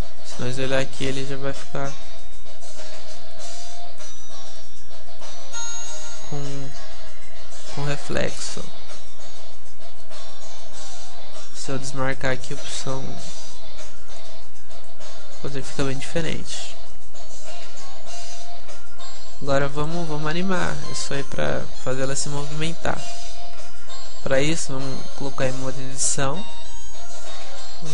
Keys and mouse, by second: 0.8-8.6 middle drag, 14.1-17.9 drag, 17.9-19.8 middle drag, 19.8-22.0 right drag, 23.0 p, 24.5 Tab.